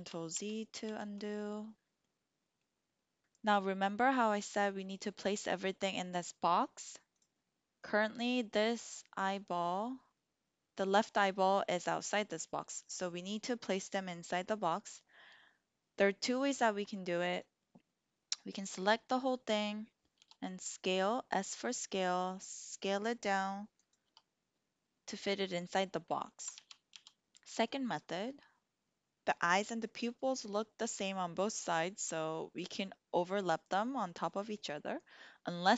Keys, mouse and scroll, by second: 0.2 ctrl+z, 0.7 ctrl+z, 7.7-9.0 drag, 17.5-18.5 drag, 20.2 s, 23.7 click, 24.0 g, 26.4 ctrl+z, 26.8 ctrl+z.